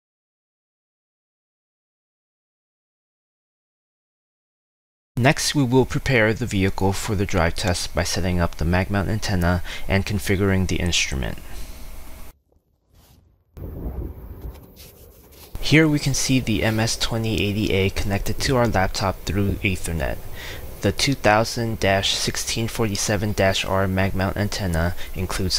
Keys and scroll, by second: 0.4 ctrl+c, 1.1 ctrl+v.